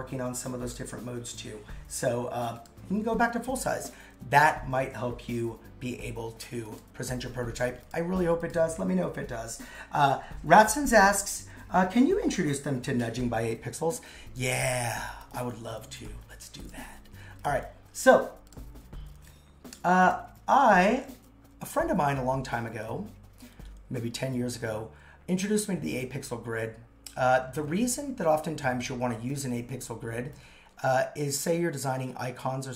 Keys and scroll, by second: 11.5 super+x.